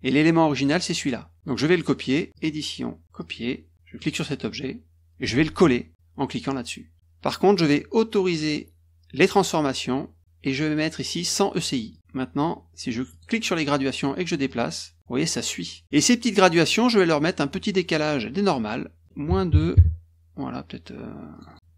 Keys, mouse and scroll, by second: 0.6 click, 2.3 click, 3.1 click, 4.0 click, 9.1 click, 11.9 click, 13.1 click, 14.4 click, 15.9 click, 19.0 click, 21.3 click, 21.4 click.